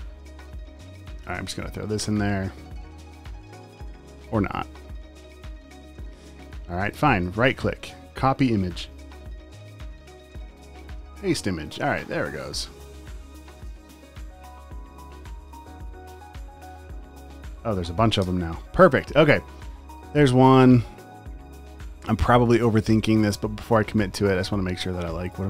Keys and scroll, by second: 11.4 v, 13.1 super+z, 13.8-16.2 typing, 18.3 BackSpace.